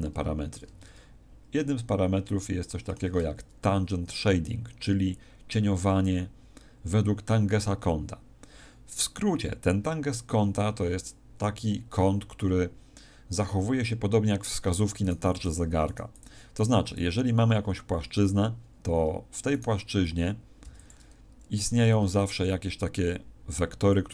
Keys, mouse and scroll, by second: 0.7 ctrl+middle click, 15.0 right click, 15.3 x, 15.8 right click, 16.0 x, 16.6 right click, 16.7 x, 19.4 right click, 20.6 x, 21.7 shift+a.